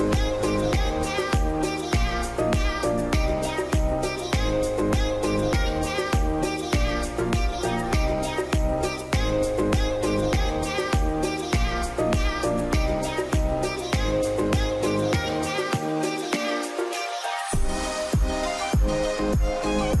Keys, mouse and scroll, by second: 4.0 Escape, 4.7 double click, 5.4 KP_3, 5.6 KP_9, 5.6 KP_5, 5.8 Return, 12.4 Return, 12.4 KP_9, 13.0 KP_6, 13.2 Tab, 14.8 shift+Tab, 15.1 KP_7, 16.2 middle click, 16.4 scroll down 1, 16.9 alt+middle click, 17.3 F3, 17.7-18.2 scroll up 1, 18.2 middle click, 18.3 scroll up 1, 18.5 scroll down 1, 18.9 alt+middle click, 19.5 alt+scroll up 2.